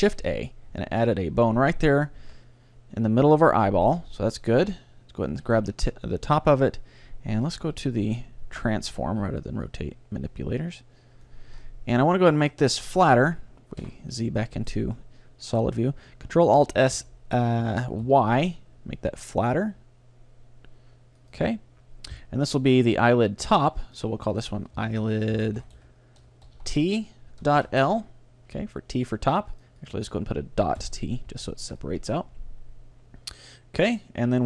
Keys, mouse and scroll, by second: 0.0 shift+a, 0.7-3.0 middle drag, 2.2 z, 3.3 z, 3.9-7.4 right drag, 8.6-11.5 drag, 11.6-13.6 middle drag, 12.1-16.4 right drag, 13.8 z, 15.0-16.8 middle drag, 16.5 ctrl+alt+s, 21.4-23.2 drag, 22.2 KP_3, 23.9-25.8 drag, 29.6-31.4 drag.